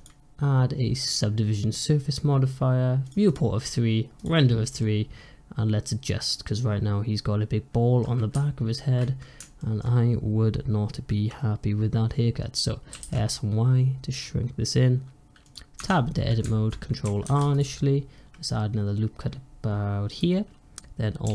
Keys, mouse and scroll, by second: 4.7-7.7 middle drag, 9.5-12.5 shift+middle drag, 12.8 s, 15.6 Tab, 17.1 ctrl+r.